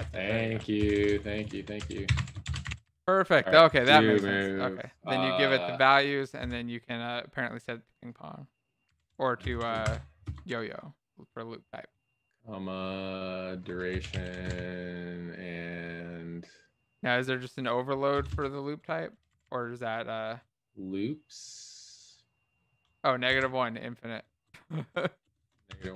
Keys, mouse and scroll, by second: 11.0 BackSpace, 18.6-20.1 typing.